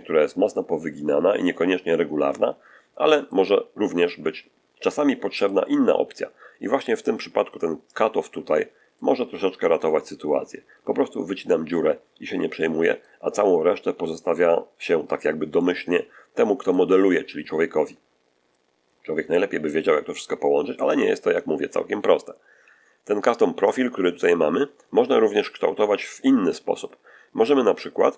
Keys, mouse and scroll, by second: 3.7-5.6 middle drag, 7.8 click, 8.8-13.1 middle drag, 15.4-16.8 middle drag, 17.0-19.8 middle drag, 20.6 scroll up 1, 23.6 click, 24.2-24.6 scroll down 1, 24.8-25.1 scroll down 1.